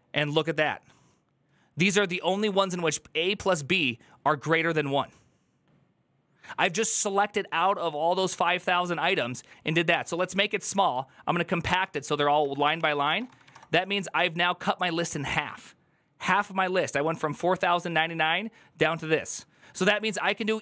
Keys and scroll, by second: 9.8 ctrl+Left, 10.1-11.0 typing, 11.6 Return, 12.2 Up, 12.4-14.0 typing.